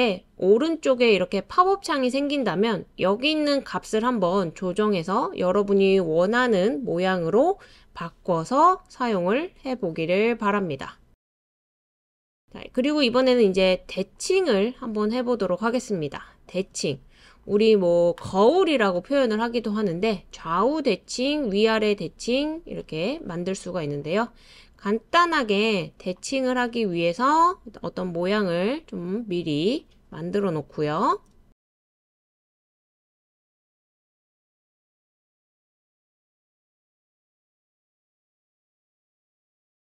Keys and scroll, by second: 6.8 BackSpace, 7.6 BackSpace, 12.0 super+c, 12.3 super+v, 27.6 super+c, 27.8 super+v.